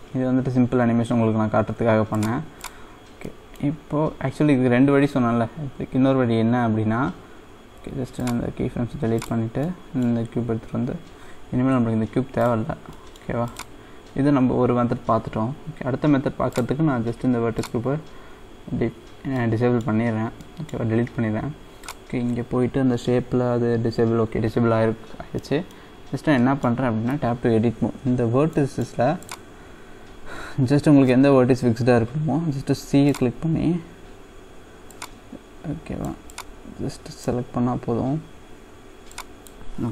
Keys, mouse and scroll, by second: 2.1-3.1 drag, 3.1 scroll down 2, 3.3-7.9 middle drag, 9.2 click, 9.6 scroll up 1, 9.7-11.7 middle drag, 11.7 x, 13.0 middle click, 13.5-14.6 drag, 14.6-16.5 scroll down 1, 16.5-19.4 drag, 19.4 middle click, 20.0-20.4 scroll up 3, 20.4-21.9 middle drag, 21.9 click, 22.2-24.3 scroll down 1, 24.3-25.4 scroll down 1, 25.4 middle click, 26.0-26.4 scroll up 2, 26.4 middle click, 28.5 middle click, 29.6-31.1 scroll down 1.